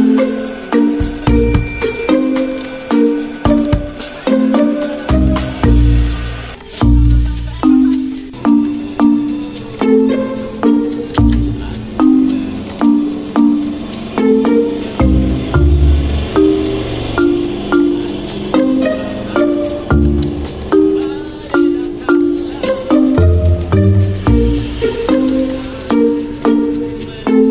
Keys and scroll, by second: 13.3 F9, 16.2 ctrl+v, 21.3 d, 22.5 d.